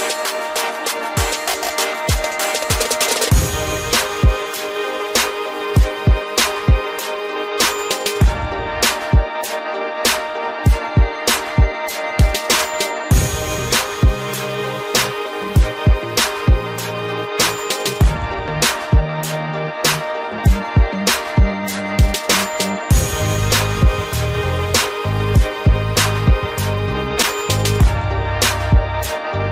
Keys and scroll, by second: 7.9 Return.